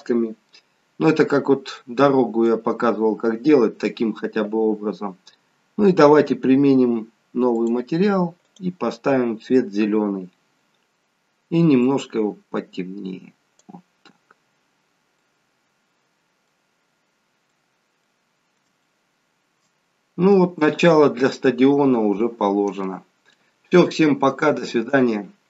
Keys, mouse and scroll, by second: 1.3-1.9 scroll down 3, 1.9 middle click, 2.8-3.4 scroll up 1, 4.4-4.9 scroll up 2, 7.6 click, 9.0 click, 15.1 scroll up 1, 15.2 middle click, 16.8-17.5 scroll up 2, 17.5 middle click, 17.5 scroll up 2, 18.9 shift+middle click, 20.0 scroll up 2, 20.7 shift+middle click.